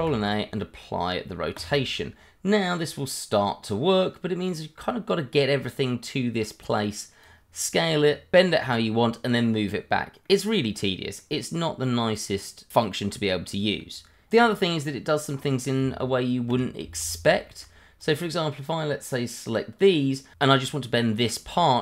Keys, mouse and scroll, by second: 1.5 click, 3.7 click, 10.2 middle click, 11.9-12.3 scroll up 1, 12.3 middle click, 12.8 middle click, 14.3 click, 15.2 scroll up 1, 15.8 Tab, 17.0 shift+z, 17.4 shift+middle click, 18.0 click, 21.4-21.8 scroll down 1.